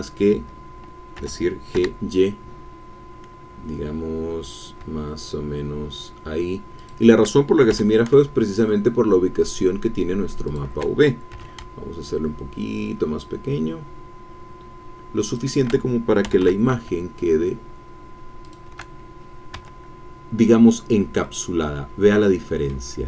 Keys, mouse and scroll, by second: 1.2 g, 1.7 y, 6.8 shift+click, 7.7 g, 10.5 shift+click, 11.3 s, 11.4 click, 15.3 shift+click, 16.0-16.9 typing, 18.5 shift+click, 20.1 Tab, 21.2-22.9 drag.